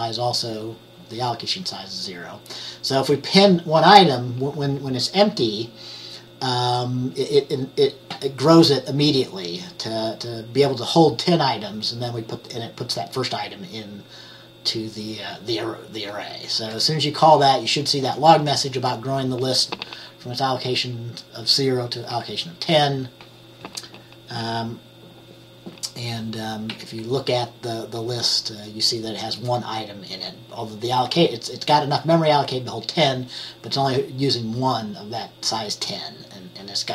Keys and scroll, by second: 16.7 F10, 26.8 F10.